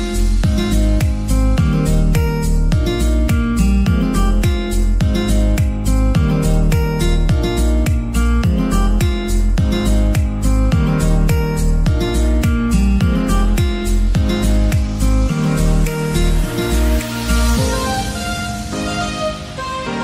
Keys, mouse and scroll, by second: 0.3-1.2 middle drag, 1.2 alt+z, 1.4-2.4 middle drag, 2.4 KP_3, 3.2 scroll up 3, 3.5 shift+middle click, 4.1 click, 8.1 ctrl+r, 9.2 click, 9.6 right click, 10.4 click, 11.4 alt+z, 11.9 alt+z, 12.6-14.0 middle drag, 14.0 m, 14.4 click, 14.9 scroll down 2, 15.2-16.9 middle drag, 16.9 KP_3, 17.8 drag, 19.3 m, 19.8 click.